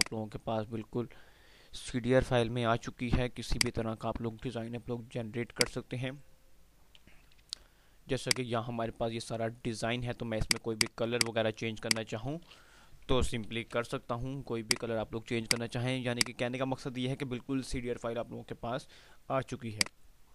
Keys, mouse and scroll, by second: 0.1 F2, 1.7 F3, 2.6 F2, 5.3-7.6 drag, 7.6 Delete, 8.1-10.3 drag, 13.4 ctrl+l, 14.8 click, 17.4 F3, 18.7 F2, 19.5-20.3 drag.